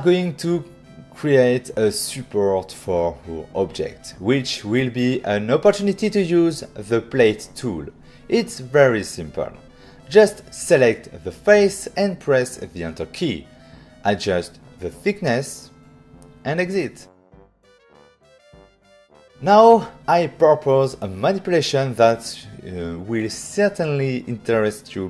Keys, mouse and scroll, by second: 0.5 middle click, 1.2 shift+middle click, 2.9 middle click, 3.8 shift+middle click, 4.7-5.2 scroll up 2, 5.2 click, 6.0 f, 7.6 click, 10.3 click, 10.4 click, 12.6 Return, 13.2 middle click, 13.9 ctrl+middle click, 14.6 middle click, 15.0 ctrl+middle click, 15.4 click, 15.9 click, 17.8 click, 18.0 click, 18.1 click, 18.7 click, 19.2 click, 19.8 ctrl+middle click, 21.5 middle click.